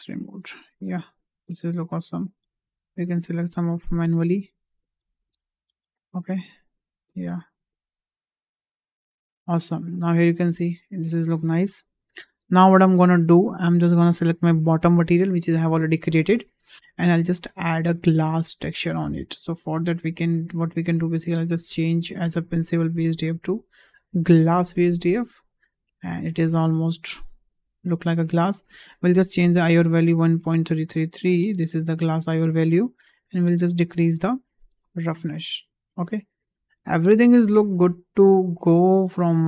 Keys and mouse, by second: 0.8 middle click, 2.0 click, 3.2-4.2 drag, 4.5 middle click, 5.4 ctrl+z, 5.6 middle click, 6.3 shift+click, 7.3-8.7 drag, 9.1 click, 9.2 Tab, 9.9-10.7 middle drag, 10.9 `, 12.3 shift+middle click, 12.9 shift+middle drag, 14.1 click, 21.0-21.4 drag, 22.2-24.4 drag, 28.3-31.3 drag, 30.6 KP_3, 33.0-34.7 drag, 39.1 shift+middle drag.